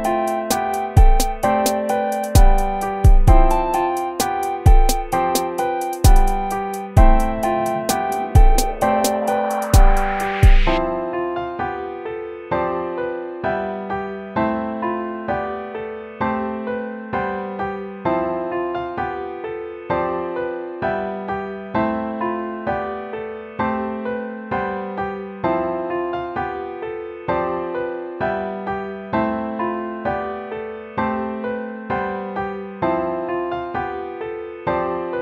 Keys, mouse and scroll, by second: 26.1 ctrl+-, 26.9 ctrl+-.